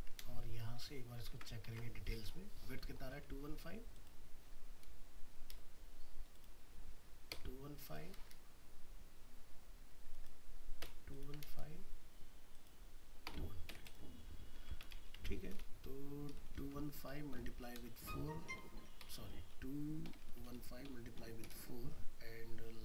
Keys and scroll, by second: 0.2 alt+Return, 1.3 ctrl+Tab, 5.4 alt+Return, 11.4 alt+Return.